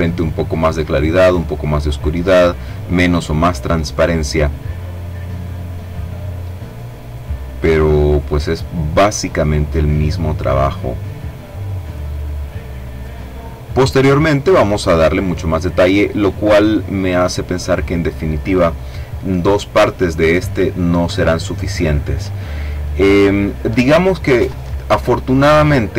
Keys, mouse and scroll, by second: 1.1 click, 3.1-5.2 drag, 5.9-7.4 drag, 8.0-12.3 drag, 13.0 click, 14.1 click, 14.9 click, 15.9 click, 24.9 click.